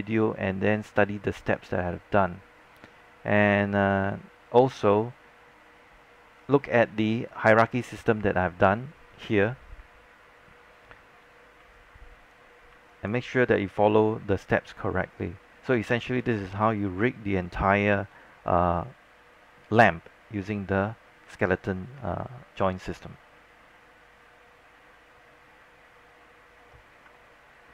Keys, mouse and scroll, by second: 11.7 alt+click, 13.0 alt+click, 13.4 scroll up 1, 13.7 alt+middle click, 15.0 alt+middle click, 15.7 scroll down 1, 16.1 alt+click.